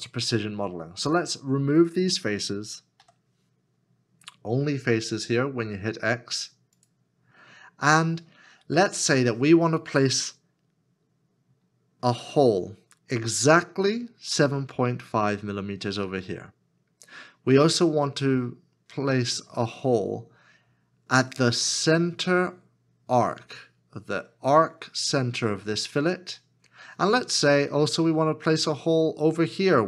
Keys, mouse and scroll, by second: 1.8 middle click, 1.8 shift+click, 3.0 x.